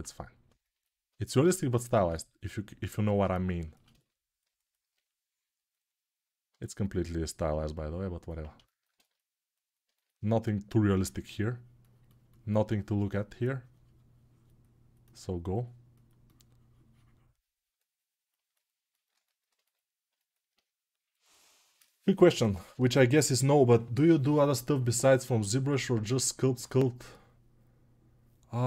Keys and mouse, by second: 3.4-6.4 ctrl+alt+shift+drag, 16.6-28.6 drag.